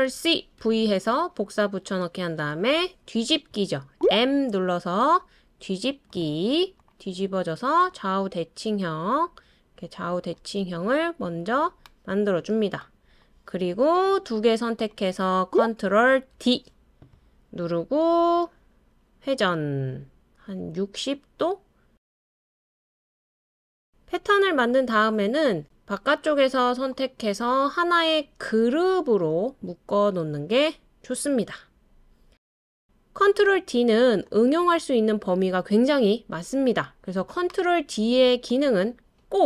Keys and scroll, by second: 0.1 super+c, 0.6 super+v, 4.0 m, 16.3 super+d, 22.1 super+d.